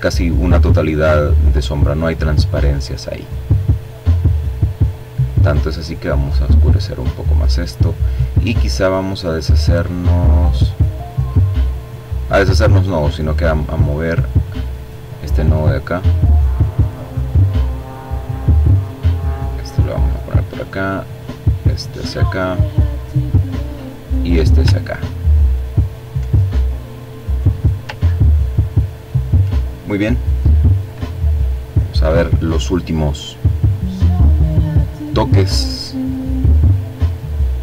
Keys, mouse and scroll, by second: 1.1-1.6 scroll down 1, 1.6-2.4 scroll up 1, 2.4 scroll up 1, 3.2-5.8 drag, 6.9-9.2 drag, 9.4 click, 11.0 click, 12.2-13.7 drag, 14.6-16.3 drag, 16.6-18.9 drag, 19.0-20.7 drag, 21.1-23.0 drag, 23.2-23.8 ctrl+scroll down 2, 25.1-26.4 drag, 26.5-27.5 ctrl+scroll up 2, 29.0 click, 31.9 click, 32.6 click, 33.7 click, 36.6-37.6 drag.